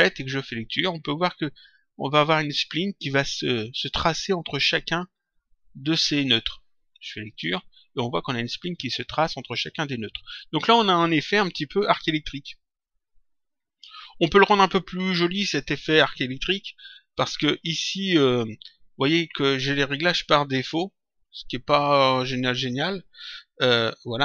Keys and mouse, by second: 7.3 click, 22.6 click.